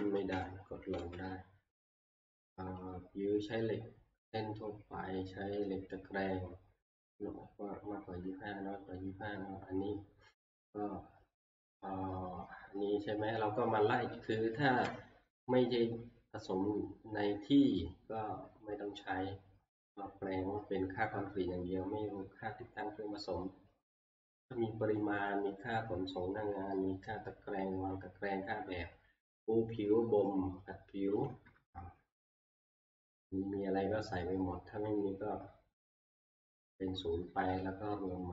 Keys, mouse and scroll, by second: 1.0 Page_Up, 3.7 scroll, 7.0 click, 7.8-8.7 scroll, 31.1 click, 31.3 alt+Tab.